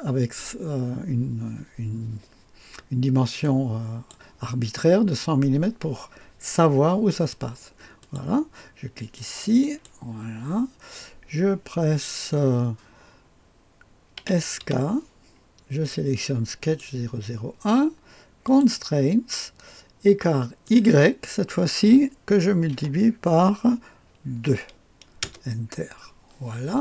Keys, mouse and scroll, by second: 3.4-4.8 drag, 8.0 click, 9.6 click, 14.2-14.6 typing, 16.6 click, 18.4 click, 20.6 click, 22.7 typing, 24.4 typing, 25.2 Return, 25.9-26.6 typing.